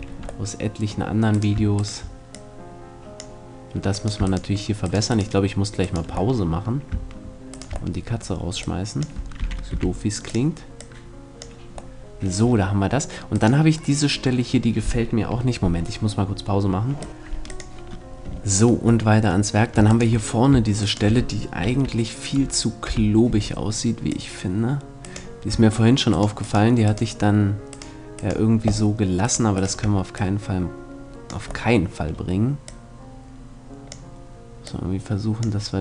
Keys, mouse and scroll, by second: 4.5-8.1 middle drag, 9.4 r, 12.9-14.7 middle drag, 13.4-16.0 right drag, 16.0 middle click, 18.7 middle click, 19.5-22.4 right drag, 21.3 KP_3, 22.5 KP_1, 23.7-25.5 drag, 25.9-30.1 shift+right drag, 29.7 click, 31.3-32.3 middle drag, 33.5-35.8 drag.